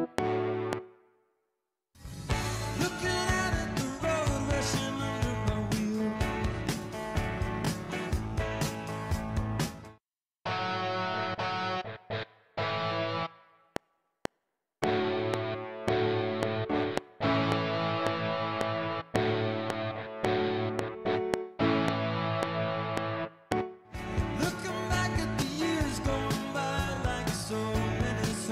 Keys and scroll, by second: 0.7 space, 2.0 space, 9.7 space, 13.6 F7, 23.5 space.